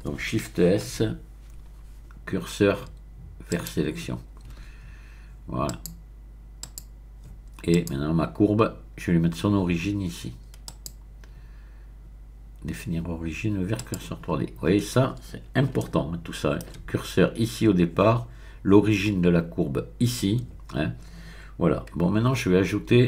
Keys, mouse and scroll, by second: 0.9 shift+s, 3.5 click, 4.6 Tab, 5.7 click, 6.6 click, 7.7 click, 10.6 click, 13.8 click, 15.8-17.1 shift+middle drag, 22.0 Tab, 22.8 Tab.